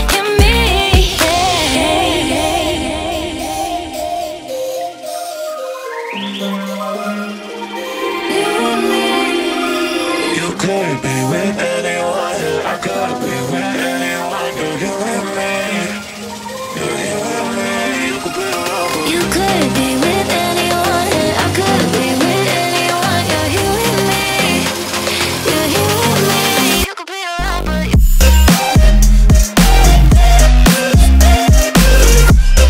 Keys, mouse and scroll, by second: 0.5 click, 0.9 click, 1.7 click, 3.4 click, 3.7 drag, 4.9 drag, 6.4 click, 8.1-11.3 middle drag, 11.3 drag, 12.1 click, 13.4 click, 14.2 click, 15.7 click, 17.1-19.5 drag, 20.3-23.3 drag, 26.0-30.4 middle drag, 32.3-32.6 drag.